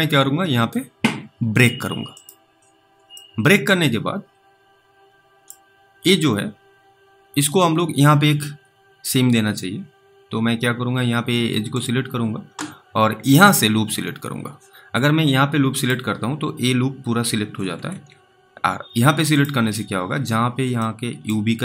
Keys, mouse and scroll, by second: 2.2 click, 3.4 alt+middle click, 11.8 click, 15.7 click, 17.9 ctrl+z, 20.2 click, 20.2-20.6 scroll up 2, 21.1 alt+middle click.